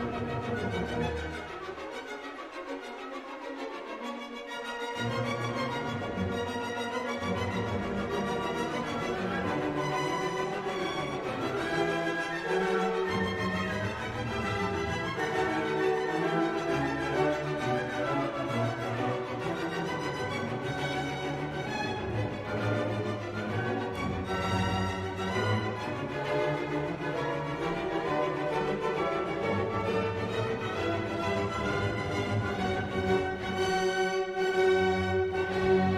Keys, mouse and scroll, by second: 0.9 3, 1.3 0, 2.3-10.1 drag, 10.5-14.3 drag, 14.3-16.1 drag, 16.7-17.4 drag, 17.6 1, 18.0 0, 19.0-20.6 drag, 20.7 click, 21.9 click, 22.3 click, 24.2 click, 26.3 click, 26.8 space, 27.6-31.6 drag, 31.8 click, 33.7 click, 35.1 click.